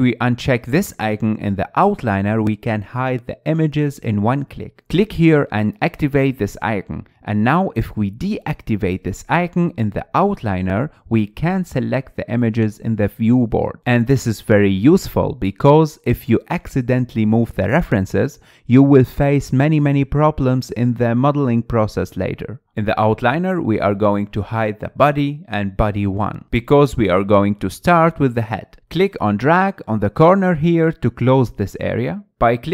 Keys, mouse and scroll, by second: 0.3-0.7 scroll up 3, 0.7 middle click, 1.1 click, 1.6 click, 2.0 click, 2.5 click, 3.4-5.1 shift+middle drag, 5.1 click, 6.7-9.7 drag, 12.5 click, 13.5 middle click, 14.3 click, 15.1 click, 15.7 click, 16.3 click, 16.7 click, 17.0 drag, 17.4 drag, 18.0-18.8 middle drag, 18.8-19.2 drag, 19.2-22.7 middle drag, 23.0 click, 25.5 drag, 26.2-27.6 middle drag, 27.6 KP_1, 28.4-28.9 scroll up 7, 29.0-30.5 shift+middle drag, 30.8-32.7 drag.